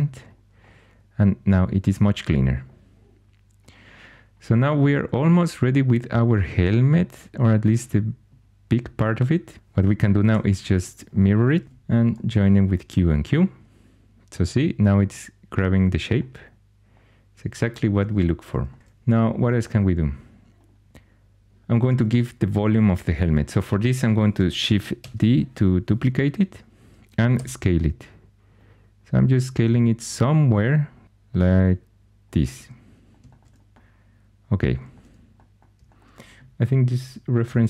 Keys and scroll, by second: 10.2 alt+x, 11.6 typing, 24.9 shift+d, 27.3 s.